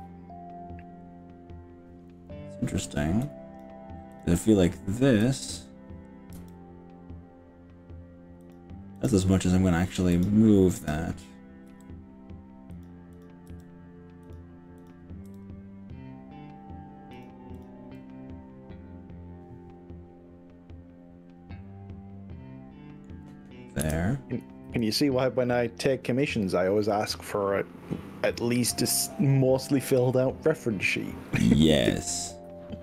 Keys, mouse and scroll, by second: 3.3 click, 4.1 click, 5.2 click, 6.4 g, 8.5 click, 9.0 click, 10.2 click, 10.9 click, 11.7 g, 12.9 click, 13.3 click, 13.5 g, 14.3 click, 15.3 g, 17.3 click, 17.6 click, 18.1-23.1 middle drag, 23.9 KP_1, 24.8 KP_1, 24.8 KP_3, 28.5 click, 29.3 click, 31.3 click, 31.9 g.